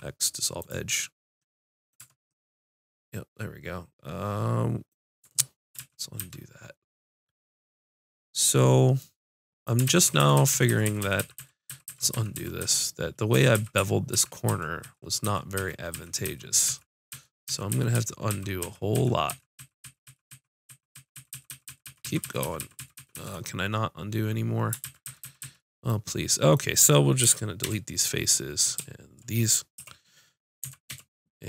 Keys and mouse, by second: 2.0 Tab, 2.3 click, 5.2 Tab, 5.8 ctrl+z, 6.2 ctrl+z, 9.9-11.0 ctrl+z, 11.4 ctrl+z, 11.7 ctrl+z, 11.9 ctrl+z, 12.1 ctrl+z, 12.3 ctrl+z, 12.6 ctrl+z, 13.3 ctrl+z, 13.5 ctrl+z, 13.8 ctrl+z, 14.1 ctrl+z, 14.5 ctrl+z, 14.8 ctrl+z, 15.2 ctrl+z, 15.6 ctrl+z, 15.9 ctrl+z, 16.3 ctrl+z, 16.7 ctrl+z, 17.1 ctrl+z, 17.5 ctrl+z, 17.7 ctrl+z, 17.9 ctrl+z, 18.3 ctrl+z, 18.6 ctrl+z, 18.9 ctrl+z, 19.3 ctrl+z, 19.6 ctrl+z, 19.8 ctrl+z, 20.1 ctrl+z, 20.3 ctrl+z, 20.7 ctrl+z, 21.0 ctrl+z, 21.1 ctrl+z, 21.3-22.6 ctrl+z, 22.8 ctrl+z, 23.0 ctrl+z, 23.1 ctrl+z, 24.8 ctrl+z, 25.1 ctrl+z, 25.2 ctrl+z, 25.4 ctrl+z, 27.3 x, 29.8 l, 30.6 x.